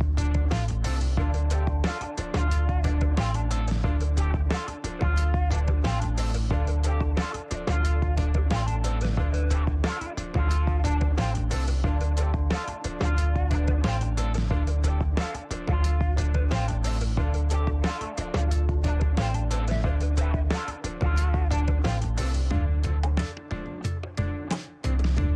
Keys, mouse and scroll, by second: 1.2 click, 2.2 click, 3.5 click, 5.0 middle click, 5.4 shift+right click, 6.3 shift+right click, 7.2-7.5 scroll up 2, 8.0 shift+right click, 9.9 click, 10.3 click, 11.7 scroll down 2, 14.0 click, 15.6-16.0 scroll down 4, 16.3 middle click, 17.2 scroll up 1, 18.9 shift+middle click, 19.5 shift+right click, 20.7 middle click, 21.3 middle click, 22.0 middle click, 22.7 shift+right click, 24.2 shift+middle click, 24.5 shift+right click.